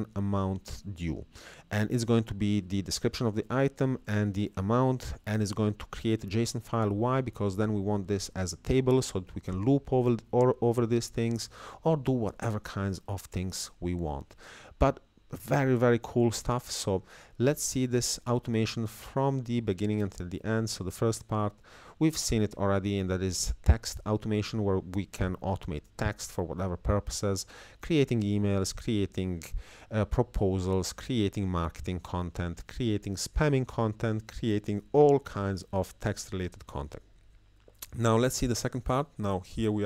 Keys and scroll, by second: 0.0 Down, 1.2 Right, 2.0 Left, 4.1 Down.